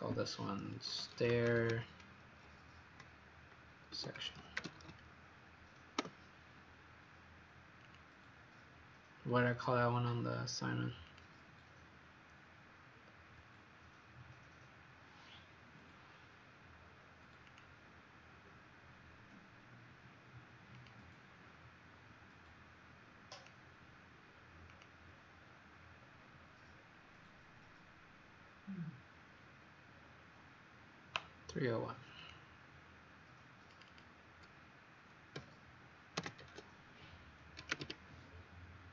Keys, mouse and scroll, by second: 0.6-2.0 typing, 3.6-5.3 typing, 5.9 Return, 7.8 click, 14.2-14.8 scroll down 5, 17.4 click, 25.9-28.2 scroll down 4, 28.2-28.6 scroll down 1, 29.3 scroll down 2, 32.1 click, 33.8 click, 35.3-38.2 typing.